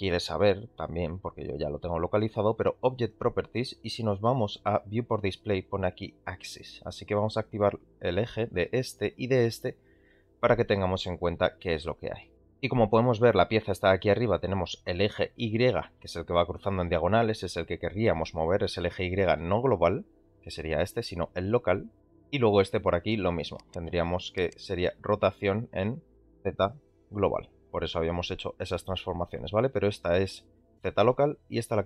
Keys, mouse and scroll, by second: 6.6 click, 10.7-11.0 middle drag, 11.1 ctrl+a, 12.2 middle click, 17.2 g, 22.4-23.1 middle drag, 23.5 middle click, 25.0 r.